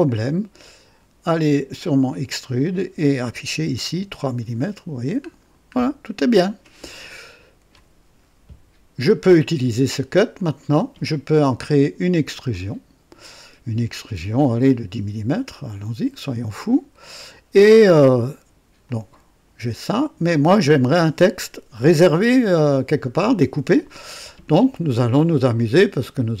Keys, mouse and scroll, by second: 0.6 click, 2.2 click, 3.6 KP_3, 3.8 KP_Enter, 5.3-5.7 scroll down 2, 7.0-7.9 drag, 10.3 click, 12.4 click, 15.5 click, 16.7-18.7 drag, 18.8-20.0 drag.